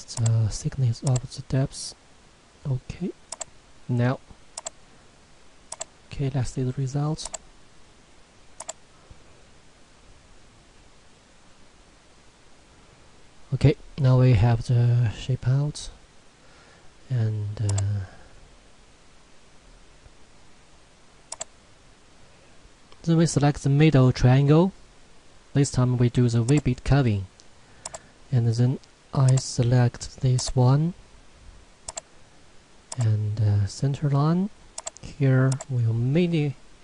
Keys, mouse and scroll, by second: 12.2-15.1 middle drag, 16.2-17.7 scroll up 1, 17.7 click, 21.3 click, 26.5 click, 35.8 click.